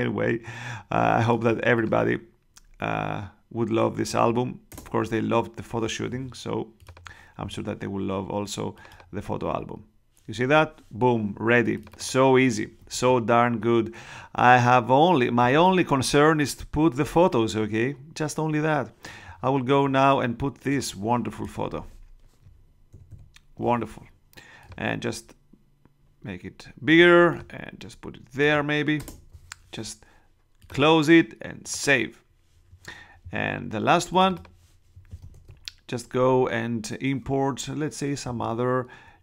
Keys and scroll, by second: 4.7 shift+Return, 12.9 super+Tab, 22.9 super+-, 28.9 shift+Return, 29.5 Return, 35.3 super+Tab.